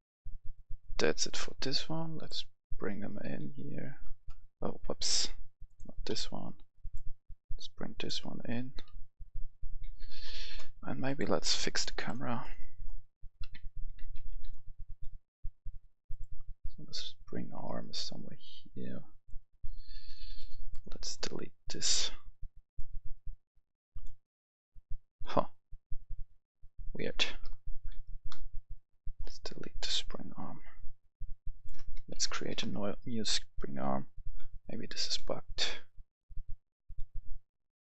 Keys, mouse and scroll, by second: 2.6 right click, 2.7-4.1 typing, 5.1 click, 6.1 Delete, 6.8 click, 8.7 right click, 8.9-10.6 typing, 11.1 click, 12.8 right click, 13.0-14.3 typing, 14.9-20.1 drag, 21.2-27.7 drag, 27.7 KP_0, 28.1 Return, 29.2 click, 30.1 Delete, 31.6 click, 32.1-32.6 typing, 33.7-37.8 drag.